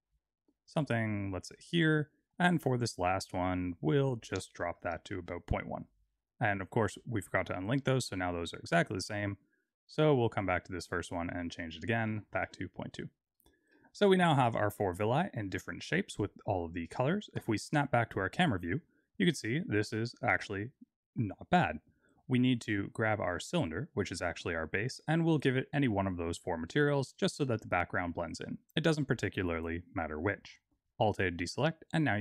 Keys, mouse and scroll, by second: 1.5 click, 1.9 click, 4.3 click, 5.9 click, 8.3 click, 9.8 click, 10.2 click, 11.5 click, 13.5 click, 13.8 shift+middle click, 17.5 KP_0, 23.7 click, 25.5 click, 30.6 alt+a.